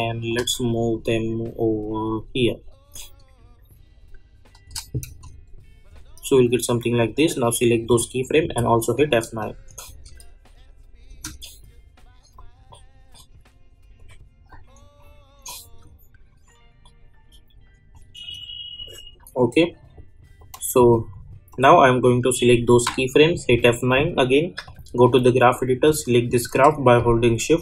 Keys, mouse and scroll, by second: 0.6-4.6 shift+drag, 5.0 space, 7.0-8.4 drag, 8.4 F9, 9.4 click, 9.9 space, 12.3-23.3 drag, 23.3 F9, 24.6-27.6 drag.